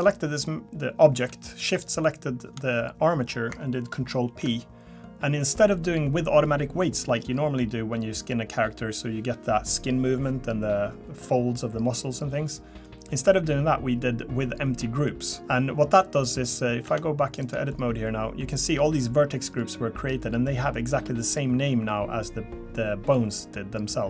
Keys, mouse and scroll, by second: 1.7 shift+click, 4.2 ctrl+p, 16.4 click, 16.8 Tab, 17.4 click, 19.5-19.8 scroll up 2, 20.2-20.5 scroll up 3.